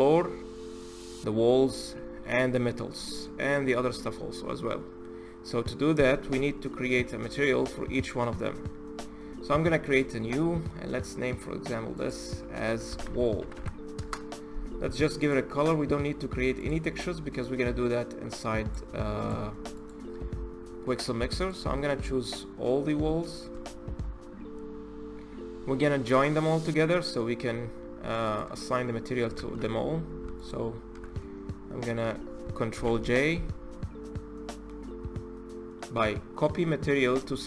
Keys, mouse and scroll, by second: 0.0-2.3 scroll down 1, 2.3-5.4 middle drag, 7.1 click, 9.6-13.3 drag, 13.3 l, 14.9 click, 16.3 click, 18.9 click, 19.5 click, 20.3-21.1 scroll down 2, 21.1 shift+click, 21.6-23.0 middle drag, 23.0 shift+click, 23.4-24.0 middle drag, 24.0-25.0 scroll up 1, 25.0 ctrl+z, 25.9-27.4 middle drag, 27.4-28.0 scroll up 1, 28.0 ctrl+click, 29.1 ctrl+z, 30.1 shift+click, 30.9-32.5 middle drag, 32.5 ctrl+j, 33.5-36.5 drag.